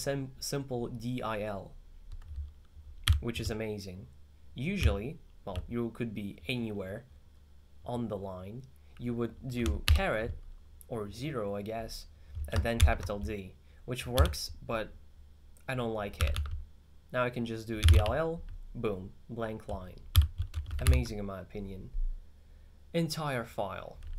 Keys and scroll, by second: 3.1 u, 4.9-5.3 typing, 9.9 shift+6, 12.8 shift+d, 14.2 u, 16.2 w, 16.4 w, 17.6-18.5 typing, 20.2 u, 21.0 alt+6.